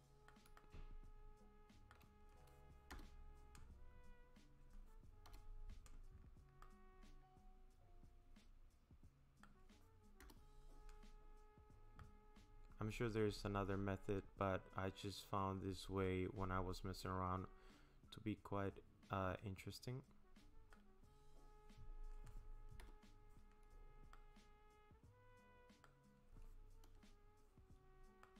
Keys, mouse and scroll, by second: 0.6 shift+middle click, 1.9 shift+middle click, 2.9 KP_0, 3.9-4.2 scroll up 3, 5.3 KP_0, 6.6 middle click, 10.2 KP_0, 11.2-11.6 scroll up 6, 12.0 middle click, 21.0-22.0 scroll down 3, 22.8 KP_0, 24.1 middle click, 26.9 KP_0, 27.9-28.2 scroll up 2, 28.2 middle click.